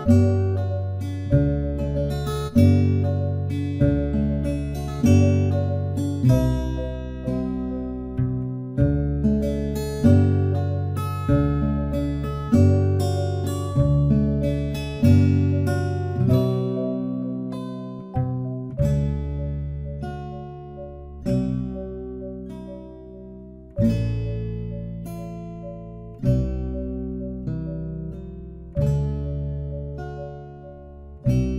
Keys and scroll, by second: 31.0 ctrl+z.